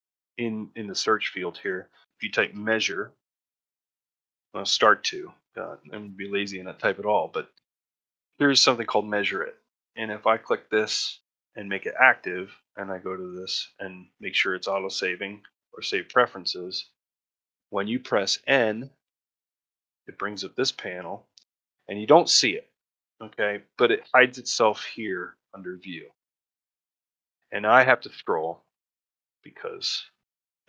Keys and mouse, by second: 28.4 middle click, 28.9 middle click, 29.5 middle click.